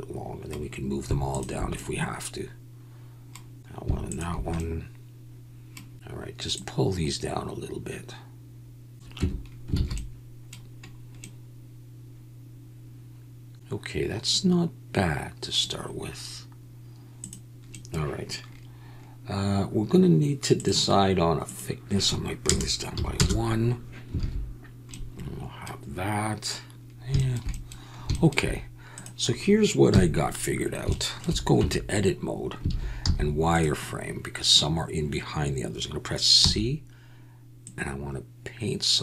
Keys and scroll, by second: 9.2 Tab, 9.7 alt+a, 24.2 alt+a, 29.9 KP_1, 31.6 Tab, 32.7 alt+a, 33.0 z, 36.4 c.